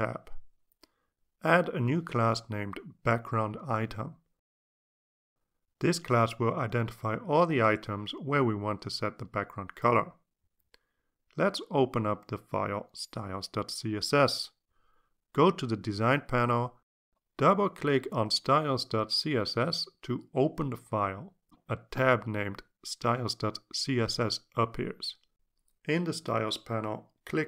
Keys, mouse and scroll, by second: 1.2-2.3 drag, 3.8 click, 4.6-8.6 typing, 15.2 Return, 17.4 click, 18.2 click, 21.9 click, 22.7 click.